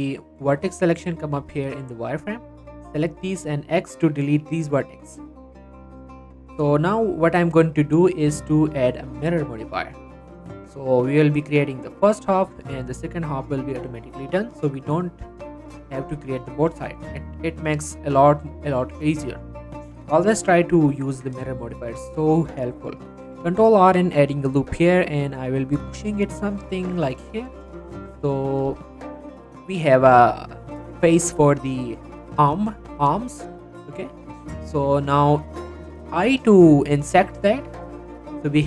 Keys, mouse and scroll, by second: 1.2-3.4 drag, 3.4-4.5 x, 5.5 middle click, 5.7 z, 6.9 click, 10.8 right click, 11.7 click, 14.3 click, 14.7-16.2 right drag, 16.2 click, 16.5 middle click, 17.3-19.2 right drag, 19.2 click, 20.6-21.0 scroll up 1, 21.1 Tab, 21.5 shift+middle click, 23.4 ctrl+r, 23.8 click, 27.0 click, 27.3 middle click, 28.7 g, 28.8 g, 29.4 click, 33.8-34.4 scroll up 1, 34.4 scroll down 1, 37.7 click, 38.0 middle click.